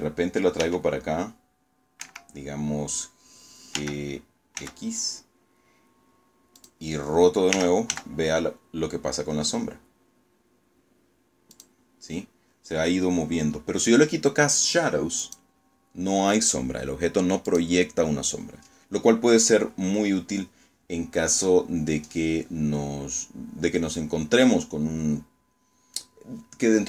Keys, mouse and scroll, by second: 0.9 Escape, 2.7 g, 3.5 x, 5.5 click, 6.4 r, 6.8 z, 10.4 click, 14.1 click, 16.3 click.